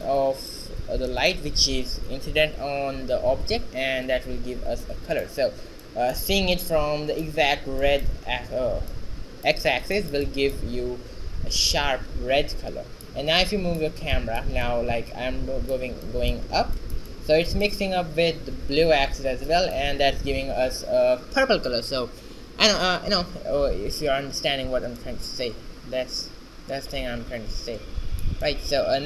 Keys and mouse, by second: 2.7 shift+z, 6.8 shift+z, 10.0 shift+z, 16.8 shift+z, 19.4 shift+z, 27.1-28.9 middle drag.